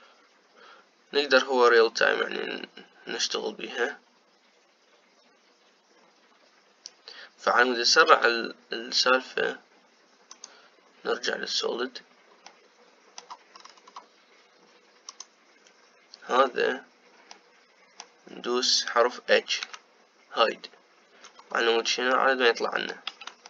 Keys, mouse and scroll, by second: 9.1 z, 13.3-14.4 middle drag, 14.4-15.8 scroll down 7, 15.8 scroll down 1, 15.9-17.2 drag, 17.2-18.2 scroll down 2, 18.2-20.7 middle drag, 20.7 h, 22.1-22.6 scroll up 4, 23.0-23.4 middle drag.